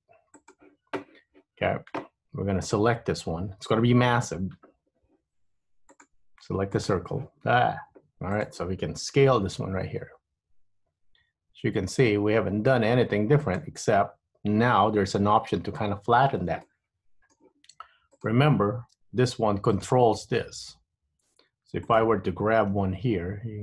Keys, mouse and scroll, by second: 2.8 click, 6.0 click, 8.5 click, 9.5 s, 15.7 KP_7, 16.8 shift+middle click, 18.2 click, 19.1 g, 21.2 Tab, 22.0 click, 22.9 g.